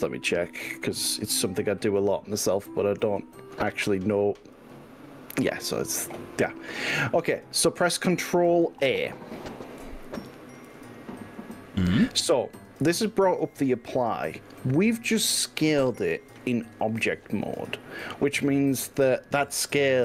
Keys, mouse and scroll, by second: 10.8 ctrl+a.